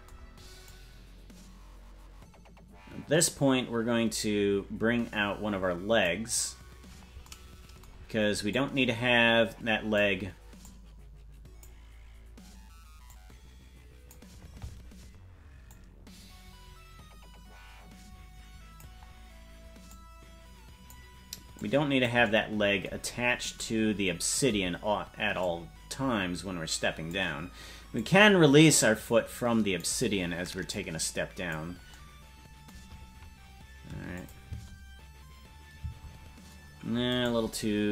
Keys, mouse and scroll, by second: 0.6-6.1 drag, 8.5-10.0 drag, 10.6-11.7 drag, 13.1-14.2 drag, 15.7-18.8 drag, 19.9-20.9 drag, 21.5 click, 23.0-23.5 scroll down 3, 25.4-27.2 drag, 27.9-29.9 drag, 30.7 click, 34.1 click, 34.4 space, 36.7 space, 37.1-37.9 right drag.